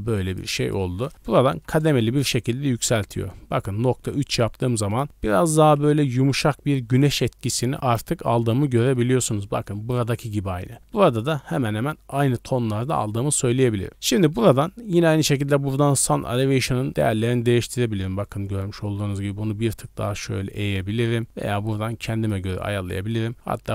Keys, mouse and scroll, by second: 0.2-1.7 drag, 8.6-9.2 scroll down 2, 8.9 middle click, 9.4 middle click, 10.7 middle click, 13.9-14.2 scroll down 2, 19.0-22.3 drag, 23.1-23.7 drag.